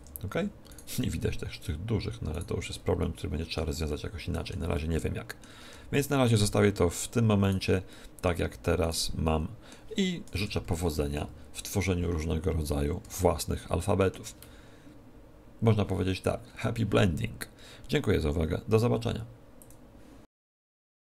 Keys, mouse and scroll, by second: 0.6-4.1 right drag, 2.9-6.8 middle drag, 5.5 Tab, 6.3 Tab, 6.8 right click, 7.7-10.5 middle drag, 8.4 right click, 10.3 KP_2, 10.3 KP_1, 10.5 KP_1, 10.9 KP_7, 12.4 middle click, 13.0-14.8 middle drag.